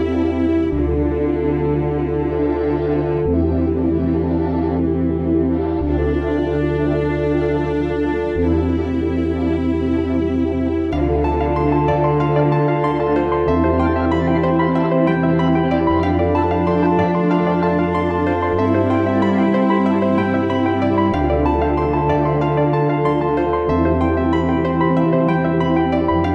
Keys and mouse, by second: 2.4-11.4 middle drag, 11.4-15.0 drag, 16.8-20.4 drag, 25.8-26.3 drag.